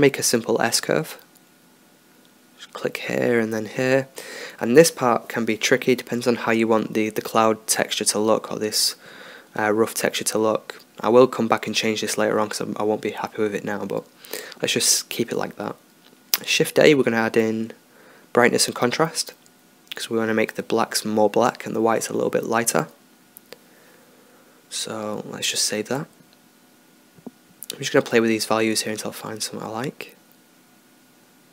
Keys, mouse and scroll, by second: 1.1-2.5 drag, 2.8-4.0 drag, 4.1-4.9 drag, 5.0-5.6 drag, 5.6 middle click, 6.0-8.3 drag, 9.1-11.1 middle drag, 11.1-11.9 right drag, 11.9 click, 16.2 shift+a, 21.0-23.0 drag, 24.4 ctrl+s, 25.9-27.6 middle drag, 28.0 click, 30.5 click.